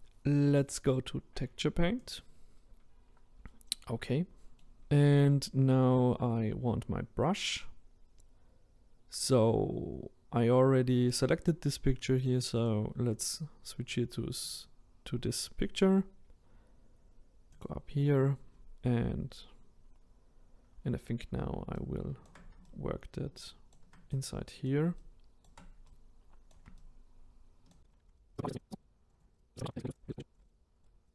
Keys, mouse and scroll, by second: 2.0 click, 4.1-14.5 middle drag, 14.5-19.6 drag, 19.6-20.8 scroll down 7, 22.3-28.6 shift+right drag, 28.6 click, 28.8 click, 29.1 right drag, 29.4 click, 29.6 click, 29.7 right click, 30.1 click, 30.4 ctrl+right click, 30.5 click, 30.8 right click, 31.0 click.